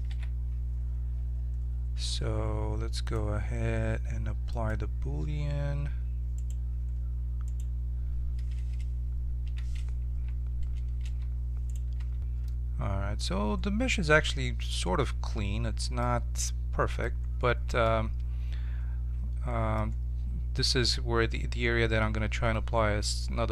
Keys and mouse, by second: 0.0 shift+space, 0.0 t, 0.0 n, 3.0-6.3 drag, 6.3-7.4 right drag, 9.4 m, 11.6 right click, 11.9 Tab, 16.0-20.1 middle drag.